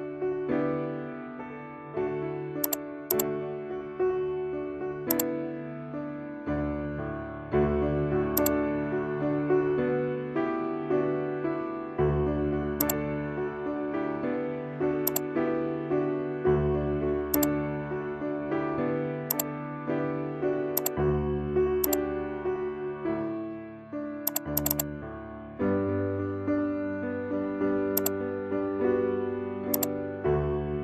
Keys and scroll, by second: 1.2 ctrl+-, 4.2 ctrl+z, 8.1 ctrl+j, 10.7 ctrl+t, 14.2 ctrl+t.